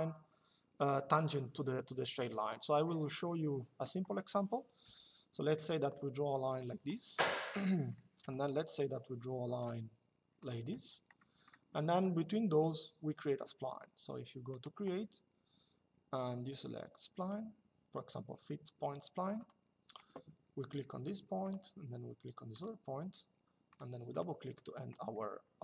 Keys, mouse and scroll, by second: 7.0 Escape, 7.3 middle click, 7.9 l, 9.3 click, 10.5 Escape, 10.9 middle click, 14.2 click, 19.1 click, 21.1 click, 22.3 click, 23.4 click.